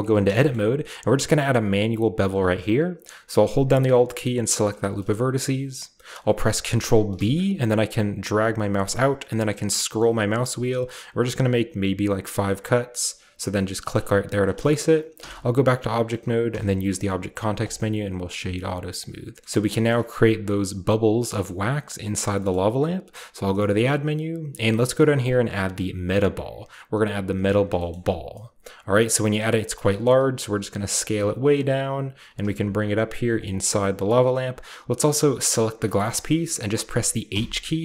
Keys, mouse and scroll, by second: 0.0 Tab, 0.5-2.2 shift+middle drag, 0.5-1.3 shift+scroll up 1, 1.3-2.2 scroll up 1, 4.4 alt+right click, 4.9-9.2 alt+middle drag, 7.1 ctrl+b, 9.2-10.2 scroll up 1, 10.2-12.4 scroll up 1, 13.8-15.1 drag, 14.4-15.1 scroll down 1, 14.6-16.3 shift+middle drag, 15.1 Tab, 16.3 scroll down 1, 16.5 w, 17.6 click, 18.1-18.6 scroll down 1, 18.3 a, 19.4-19.8 shift+middle drag, 19.9-21.2 shift+middle drag, 21.4 shift+middle click, 22.5-24.9 middle drag, 23.5 shift+a, 27.3 click, 27.7-28.3 shift+middle drag, 27.9-28.8 shift+scroll down 1, 28.3-28.8 drag, 29.4 scroll down 1, 29.5-29.8 middle drag, 29.6 scroll up 1, 30.3 s, 30.8 click, 31.0 s, 32.0 click, 32.1 typing, 33.3 drag, 33.6 typing, 33.8 click, 34.0-35.4 scroll up 1, 35.2 click, 35.4 right click, 35.8-37.5 middle drag, 36.0-36.5 scroll up 1, 37.3 typing.